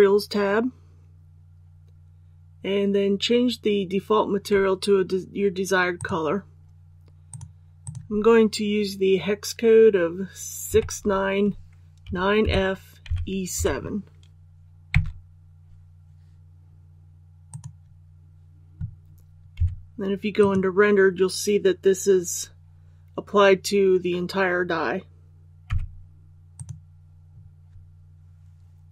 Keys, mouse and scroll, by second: 10.7 KP_6, 11.0 KP_9, 12.4 f, 13.0 e, 13.5 KP_7, 17.5-18.6 drag, 19.5 z, 20.4 click, 25.6 z, 26.5-27.6 drag.